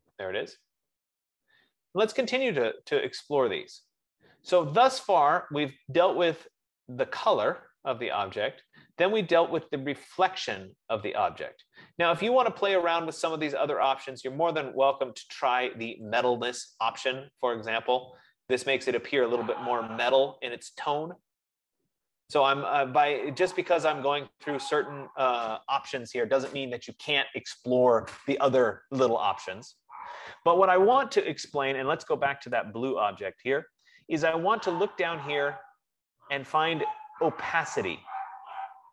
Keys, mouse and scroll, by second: 3.3 click, 17.2-22.1 drag, 32.9-35.3 drag, 35.3 middle click, 38.5 F15.